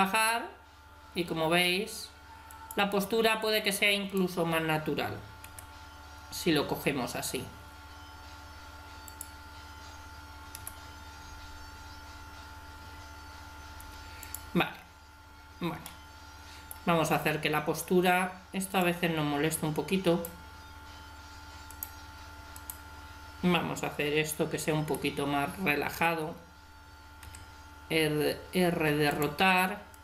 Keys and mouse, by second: 4.1 right click, 5.9 click, 10.6 g, 15.9-18.7 middle drag, 18.7-20.1 drag, 20.1 right click, 24.3 middle click, 24.9 g, 27.2 r, 29.9 right click.